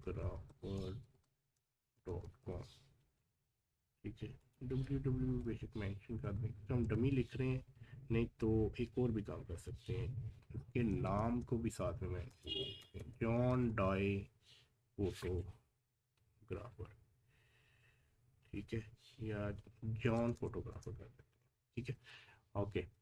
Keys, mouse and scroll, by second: 0.8-2.0 typing, 4.4 click, 5.3-6.2 typing, 9.0 typing, 12.4-13.1 typing, 15.8 typing.